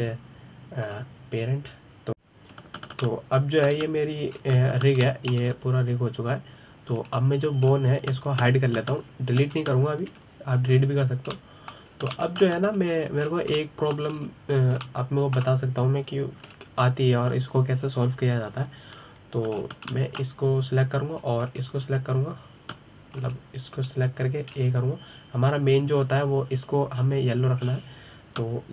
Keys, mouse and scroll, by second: 4.8-5.5 middle drag, 5.5-6.1 scroll up 1, 6.1-6.5 scroll up 1, 6.5-6.8 scroll down 3, 6.8-7.3 middle drag, 7.3-8.8 scroll up 2, 8.8 click, 9.5-10.3 scroll down 3, 10.3 scroll down 1, 11.3 h, 12.3 click, 13.1-13.5 middle drag, 13.5 scroll up 1, 13.9-14.6 middle drag, 14.6-15.0 scroll up 2, 15.0-15.4 scroll down 3, 15.4-15.9 shift+middle drag, 15.9-16.7 scroll up 3, 16.7-19.8 shift+middle drag, 21.3-21.7 scroll down 2, 21.7-23.2 middle drag, 23.2 shift+click, 25.0 click, 25.5 click, 26.4 a.